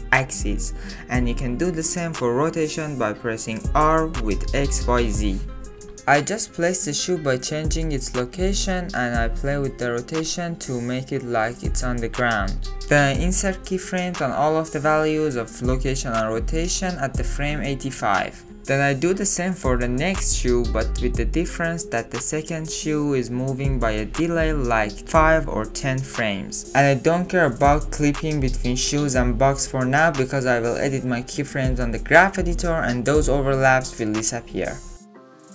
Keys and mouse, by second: 2.0 r, 6.2 ctrl+z, 6.3 n, 6.5 middle click, 7.6 g, 7.8 shift+click, 7.9 middle click, 8.0 click, 8.3 middle click, 8.6 middle click, 8.6 r, 9.0 ctrl+z, 9.1-11.8 drag, 9.3 n, 9.5 ctrl+z, 11.0 shift+middle click, 11.2 middle click, 11.9 shift+click, 12.5 n, 12.6 click, 13.2 click, 13.6 click, 13.8-14.6 drag, 14.6 Up, 14.8 Down, 15.0 Up, 15.1 click, 15.3 ctrl+z, 15.5 Left, 15.6 Right, 16.5 ctrl+z, 16.5-18.7 typing, 17.7 ctrl+z, 18.3 click, 18.9 Down, 18.9 Right, 19.1 Right, 19.1 Up, 19.2 Left, 19.3 click, 19.7 alt+click, 19.9 ctrl+click, 20.0 click, 20.2 shift+click, 20.4 Right, 20.5 Right, 20.6 Right, 20.6 Left, 20.7 Left, 20.8 Left, 21.2 i, 21.3 i, 21.5 g, 22.3 click, 22.6 click, 23.0 drag, 23.1 KP_1, 23.2 KP_3, 23.2 ctrl+click, 23.5 Left, 23.6 Left, 23.8 Right, 24.0 g, 24.4 ctrl+shift+middle click, 24.8 click, 26.0-28.6 typing, 26.9 click, 28.2 click, 28.7 click, 28.9 ctrl+click, 29.0-29.7 drag, 30.7 click, 30.9 middle click, 31.1 middle click, 31.3 space, 31.5 middle click, 31.5 space, 31.7-32.9 drag, 33.5 click, 34.3-34.9 middle drag, 34.9 shift+middle click, 35.3 ctrl+s.